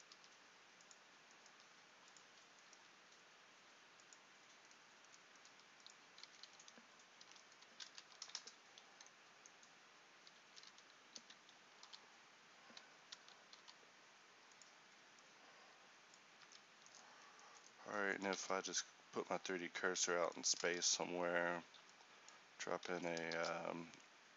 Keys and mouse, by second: 0.2 g, 1.6 g, 6.3 a, 8.0 shift+r, 10.6 a, 10.8 a, 11.2 s, 11.9 y, 13.2 s, 16.4 Tab, 17.2 a, 18.4 shift+a, 22.9 x, 23.4 shift+a.